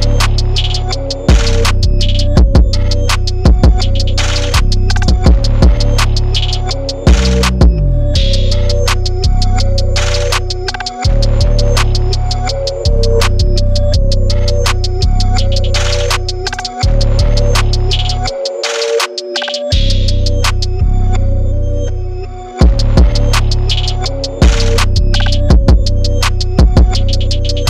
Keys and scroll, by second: 2.0-3.1 typing, 7.4 0, 9.7-10.6 typing, 12.8 super+0, 12.9 super+-, 12.9 super+-, 13.4 super+=, 13.5 super+=, 13.8 super+0, 13.9 super+-, 14.0 super+-, 14.3 super+1, 16.3 super+0, 16.5 super+1, 17.7 b, 18.7 Return, 18.7 3, 20.1 super+z, 21.4-22.3 typing, 22.7 super+z, 23.9 typing, 24.3 super+z, 26.5 typing, 27.5 super+0.